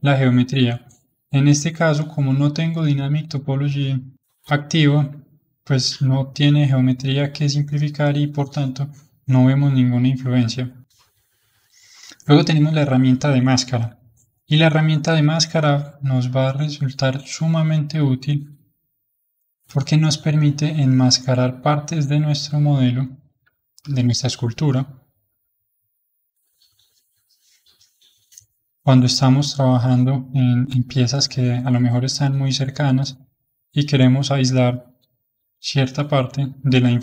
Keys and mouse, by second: 9.5-13.9 drag, 13.9 KP_1, 15.1-18.1 drag, 18.8-22.0 drag, 22.0-25.0 middle drag, 25.0-27.7 drag, 27.7-31.1 middle drag, 31.1-34.2 drag, 35.5-37.0 middle drag.